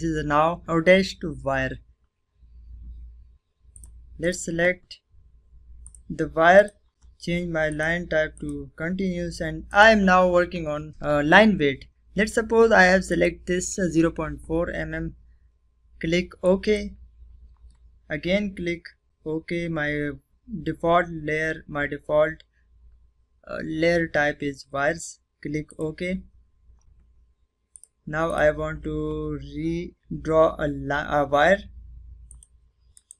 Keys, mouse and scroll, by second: 2.6 click, 10.6-11.2 scroll down 2, 11.9 click, 15.3 click, 24.5 click, 27.2 click, 31.1 click, 31.8 right click.